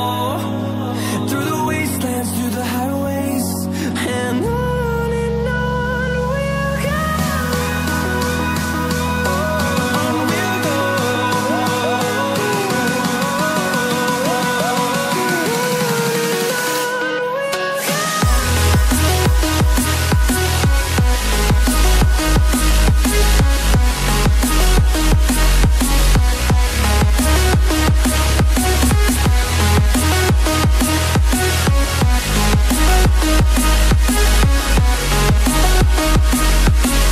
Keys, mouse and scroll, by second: 0.4 click, 3.7 scroll up 1, 4.2 click, 4.9 Delete, 5.7 ctrl+z, 6.5 click, 8.2 shift+scroll down 1, 8.4 click, 9.1 ctrl+z, 10.4 click, 15.1 scroll up 1, 15.9 scroll down 1, 16.6 click, 17.1 ctrl+c, 17.3 typing, 18.1 click, 19.1 right click, 20.6 click, 22.7 scroll up 1, 23.3 click, 26.5 click, 27.1 ctrl+z, 28.3 click, 28.7 ctrl+z, 29.5 click, 29.9 double click.